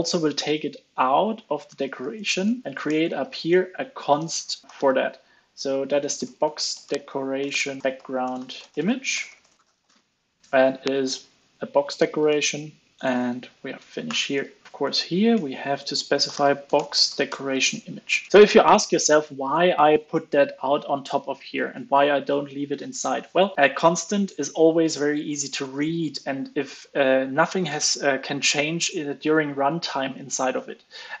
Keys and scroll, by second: 0.9 super+x, 3.1 super+v, 4.1 super+z, 10.0 super+v, 10.9 super+c, 12.3 super+v, 13.4 super+s, 14.0 alt+super+l, 14.3 super+s, 17.9 super+s, 18.3 super+s, 18.3 alt+super+l.